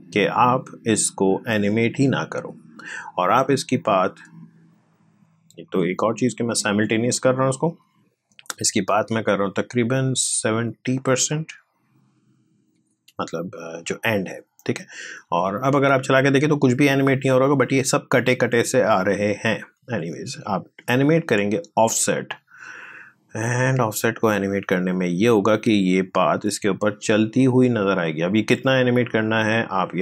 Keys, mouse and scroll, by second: 12.5 typing, 15.0-15.6 typing, 15.1 click, 18.9 space, 19.4-28.4 drag, 28.4 ctrl+z, 29.1 click.